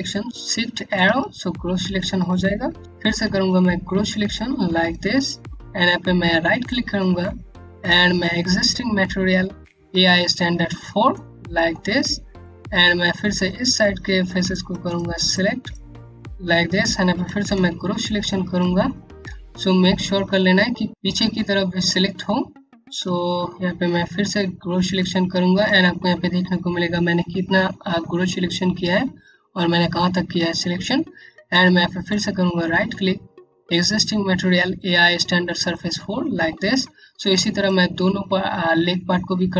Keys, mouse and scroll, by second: 0.0 typing, 2.8-3.6 typing, 6.2 right click, 11.2-11.9 scroll up 1, 11.9 alt+click, 13.0 scroll down 1, 13.9 click, 16.0 click, 17.1-17.9 typing, 18.8 scroll down 1, 19.0 alt+click, 21.0 scroll up 1, 21.4 alt+click, 22.7 typing, 24.5 click, 31.6 right click, 36.1-36.6 scroll down 1, 36.7 click.